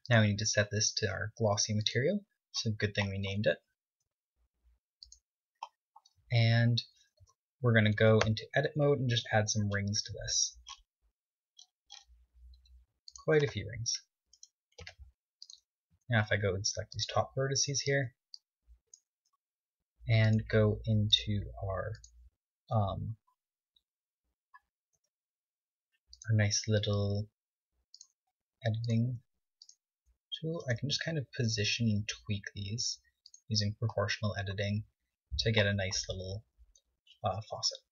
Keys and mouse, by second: 4.3 g, 6.4 KP_1, 6.8 KP_3, 7.5 ctrl+Tab, 8.2 ctrl+Tab, 9.3 ctrl+r, 14.7-16.5 right drag, 15.0 ctrl+Tab, 16.2 a, 16.5 b, 18.2 b, 20.4-24.0 drag, 25.1 r, 26.4-28.1 drag, 26.9 g, 28.5 r, 29.3 g, 30.1 e, 31.1 r, 32.4 g, 36.9 KP_4, 37.2 KP_3.